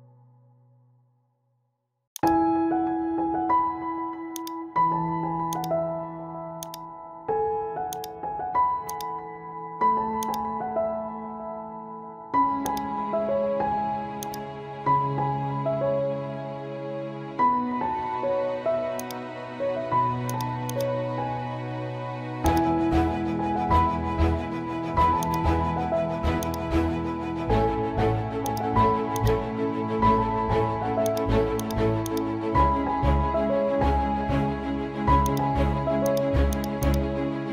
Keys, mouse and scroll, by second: 1.5 typing, 2.1 click, 2.7-3.7 typing, 4.3 click, 5.2 typing, 5.5 click, 7.4 typing, 7.9 click, 9.4 scroll up 1, 10.2 click, 11.4 scroll up 1, 12.6 click, 16.0 scroll down 1, 19.0 click, 21.6 scroll up 1, 23.1 scroll up 1, 23.6 scroll down 1, 25.2 click, 32.5 scroll down 1, 35.3 click.